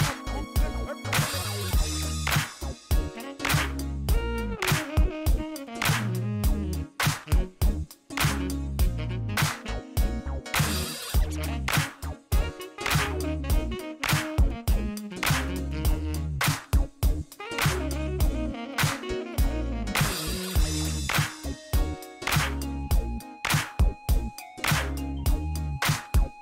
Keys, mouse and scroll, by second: 0.7 click, 2.1 middle click, 3.7 click, 4.7 click, 5.5 click, 6.7 click, 8.0 click, 9.4 click, 9.7 middle click, 10.6 click, 11.5 click, 13.1 click, 13.5 right click, 13.8 middle click, 14.4 click, 15.9 click, 16.8 click, 18.4 click, 20.6 click, 21.2 click, 22.9 click, 24.1 click, 24.5 middle click.